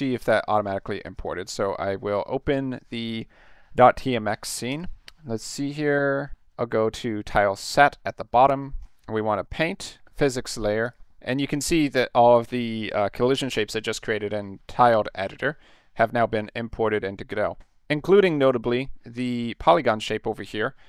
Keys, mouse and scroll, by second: 1.0 click, 1.2 click, 4.7 click, 5.4 click, 8.8 click, 9.4 click, 10.8 click, 11.1 middle click, 16.2-17.0 middle drag, 18.1 middle drag, 19.3 middle click.